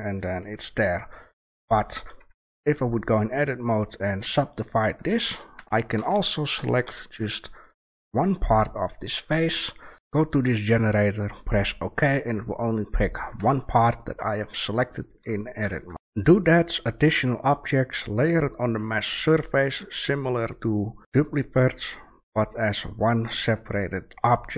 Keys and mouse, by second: 0.9 Delete, 1.7 click, 2.6 Tab, 4.8 Tab, 5.5 Tab, 5.9 a, 6.8 b, 9.5 shift+a, 13.3 Tab, 14.6 Tab, 15.9 Delete.